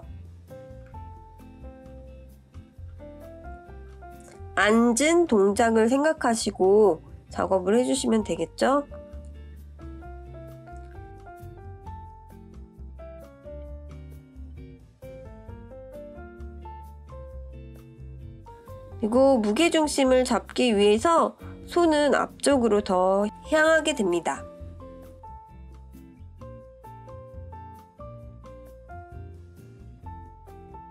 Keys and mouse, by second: 0.8 click, 1.7 click, 3.6-5.4 drag, 9.3 alt+r, 12.2-13.6 drag, 14.2-17.9 drag, 18.6 click, 19.7-21.4 drag, 22.7-24.1 drag, 26.5 click, 28.2 click, 30.5 click.